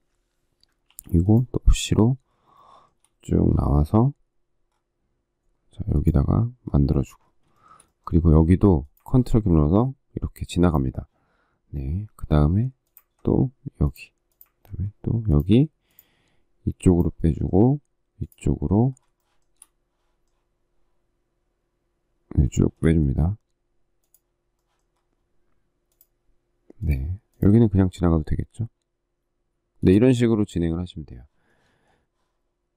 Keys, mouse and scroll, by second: 0.8 p, 2.5 shift+middle click, 7.5 shift+middle click, 19.1 shift+middle click, 22.5 shift+middle click.